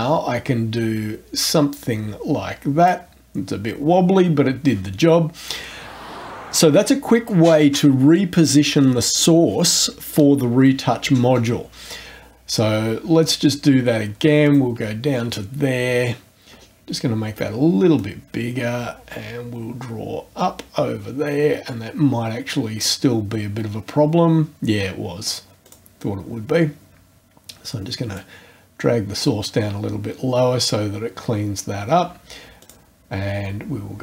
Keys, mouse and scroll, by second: 14.4 shift+click, 16.5-16.9 scroll up 2, 17.2 scroll up 2, 18.0-23.0 drag, 25.6 click, 28.2 click, 32.6 click.